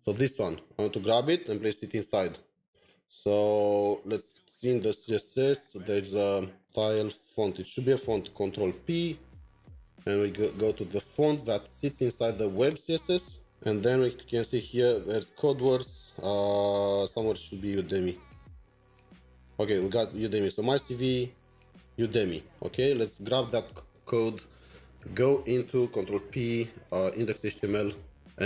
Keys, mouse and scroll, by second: 1.1 Return, 1.3 alt+Tab, 2.7 alt+Tab, 8.2 alt+t, 8.5 ctrl+p, 9.9 Down, 10.1 Down, 12.7 Down, 16.1 Return, 16.1 scroll down 4, 16.8-17.7 scroll down 4, 17.7-18.3 scroll down 1, 18.3 scroll down 2, 20.4 double click, 22.5 ctrl+c, 22.5 typing, 25.8 typing, 26.1 ctrl+p, 26.9 Down, 27.2 Return.